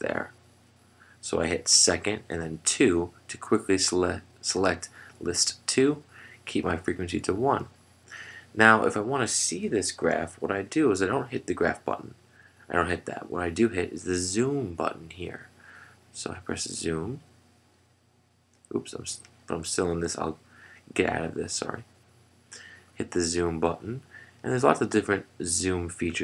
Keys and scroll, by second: 8.4 Down, 8.4 2, 16.3 F3, 22.9 F3.